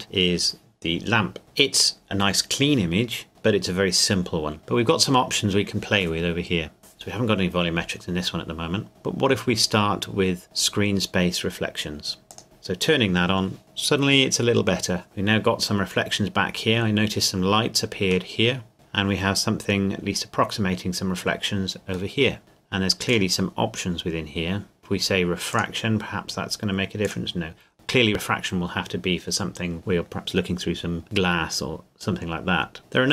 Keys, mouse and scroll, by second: 1.4 middle click, 3.1 scroll down 1, 3.4 scroll up 1, 4.0 scroll down 1, 4.6 middle click, 12.3 click, 18.3 middle click, 19.4 scroll up 1, 19.6-20.1 scroll down 1, 20.1-20.6 scroll up 1, 22.1 middle click, 23.1 click, 25.5 click.